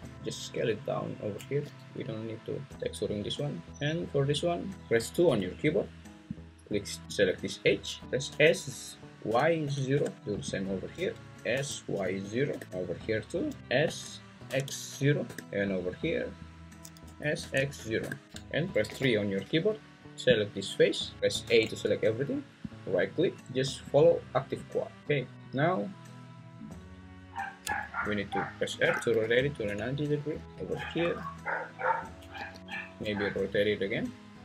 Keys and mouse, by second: 0.1 g, 0.1 s, 1.6 g, 5.3 2, 6.3 click, 8.3 s, 9.3 y, 9.6 0, 9.9 Return, 11.5 s, 11.9 y, 12.2 0, 12.5 Return, 12.5 \, 13.8 s, 14.5 x, 14.9 0, 15.2 Return, 17.0 s, 17.5 x, 17.7 0, 18.0 Return, 18.9 3, 21.5 a, 23.2-24.7 right drag, 28.8 r, 29.1 9, 29.3 0, 29.6 Return, 30.4 g, 31.0 s, 31.7 click, 32.3 g, 32.6 click.